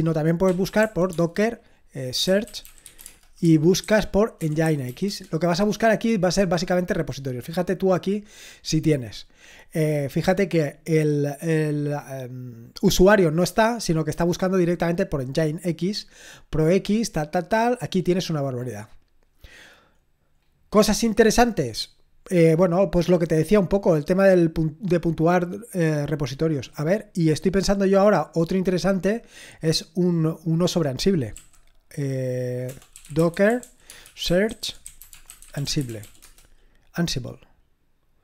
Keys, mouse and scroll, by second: 0.0-6.2 typing, 7.9-9.0 scroll up 1, 9.0-10.1 scroll down 2, 10.1-16.6 drag, 16.6-18.2 scroll down 3, 18.2-19.6 scroll up 2, 19.6-21.1 scroll down 4, 21.1-25.5 scroll up 1, 26.1 click, 27.2 click, 27.8-29.5 scroll down 1, 29.5 click, 29.7 click, 30.5 click, 31.3 typing, 32.6-36.5 typing.